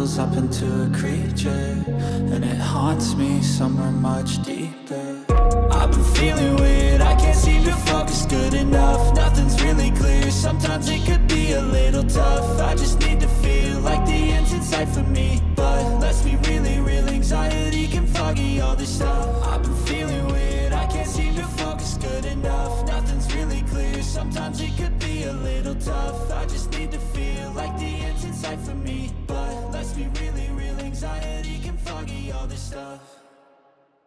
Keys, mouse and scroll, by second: 1.2 right click, 8.0 ctrl+d, 8.8 space, 9.1 alt+click, 12.4 ctrl+space, 12.5 ctrl+click, 13.2 space, 18.4 double click.